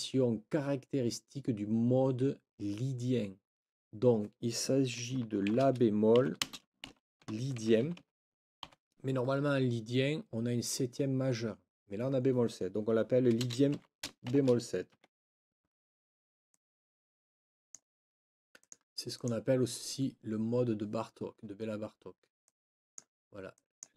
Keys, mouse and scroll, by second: 5.5-8.6 typing, 13.4 space, 13.7 b, 14.9 Escape, 16.5-17.9 drag, 18.6 click, 19.1 click, 22.4 click, 23.5 click.